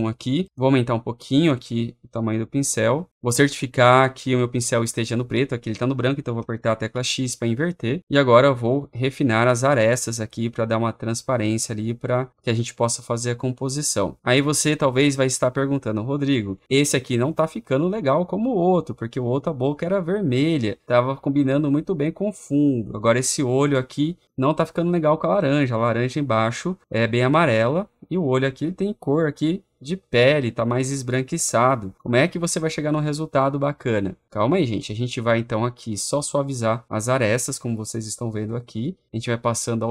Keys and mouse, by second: 0.5 click, 2.4 click, 6.8 x, 8.6 click, 9.4 click, 9.8 click, 10.1 click, 10.5 click, 10.8 click, 11.2 click, 11.5 click, 11.8 click, 12.1 click, 13.1-15.3 click, 15.5 click, 16.2 click, 16.6 click, 17.1 click, 18.6 click, 18.9 click, 19.3 click, 19.6 click, 20.0 click, 20.6 click, 22.1-26.2 drag, 27.0-29.6 drag, 30.1 click, 30.9 click, 31.2 click, 31.7 click, 31.9 click, 32.2 click, 32.2 click, 32.4 click, 32.7 click, 32.9 click, 33.2 click, 33.9 click, 35.4 click, 36.8 click, 36.9 click, 37.2 click, 38.5 click, 38.8 click, 39.4 click, 39.5 click.